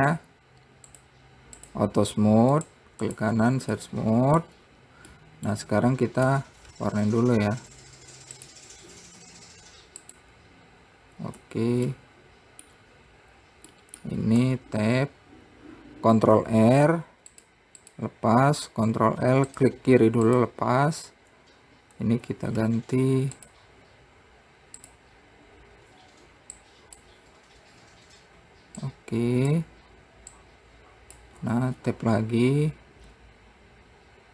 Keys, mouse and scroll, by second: 0.4 click, 1.5 click, 3.1-4.3 right drag, 4.3-6.9 middle drag, 6.9 Tab, 7.7 `, 9.8 `, 11.9 Tab, 12.5-15.0 middle drag, 15.0 Tab, 16.9 ctrl+r, 19.4 ctrl+r, 22.6 Tab, 24.0 click, 25.4 click, 28.3 scroll down 3, 29.4-32.2 drag, 32.2 Tab.